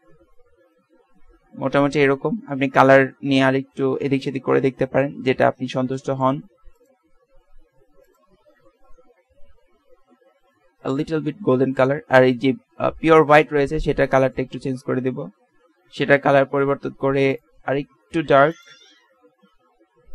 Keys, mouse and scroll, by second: 5.0-6.0 middle drag, 6.8-8.0 drag, 10.5 z, 10.7 z, 12.2-14.0 drag, 14.5 middle click.